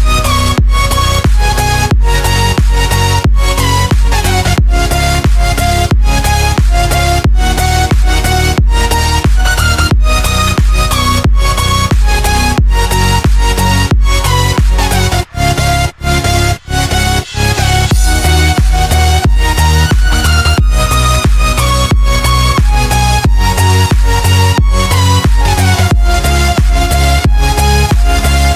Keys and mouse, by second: 0.0 drag, 1.0-2.4 middle drag, 2.6 click, 3.0-3.4 middle drag, 4.1 shift+a, 6.7 s, 10.8-11.7 middle drag, 12.4 s, 16.6-17.9 middle drag, 18.4 middle click, 19.6 g, 22.5-24.5 middle drag, 26.5 click.